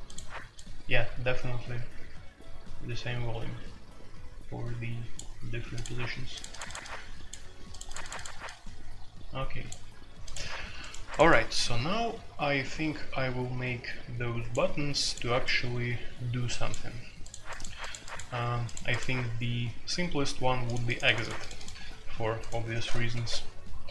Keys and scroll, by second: 23.1 super+c.